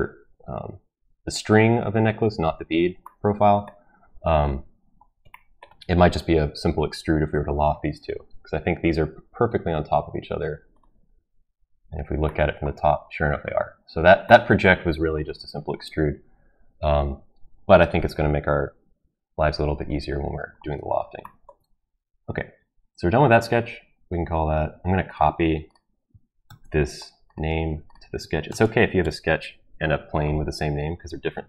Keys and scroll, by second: 26.4 ctrl+c, 28.5 ctrl+v, 29.0 Return.